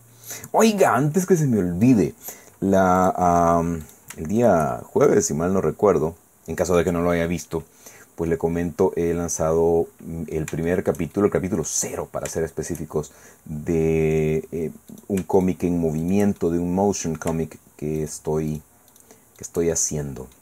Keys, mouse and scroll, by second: 3.0 click, 3.8 click, 4.0 shift+right click, 4.4 shift+right click, 5.1-7.6 drag, 7.7-8.3 scroll down 2, 8.3-11.1 drag, 11.5 click, 12.4 shift+click, 14.9 click, 15.4 shift+right click, 16.0 shift+right click, 16.4-17.4 shift+middle drag, 18.0 shift+right click, 18.9 shift+middle click, 19.4 shift+middle click, 19.7-20.4 shift+middle drag.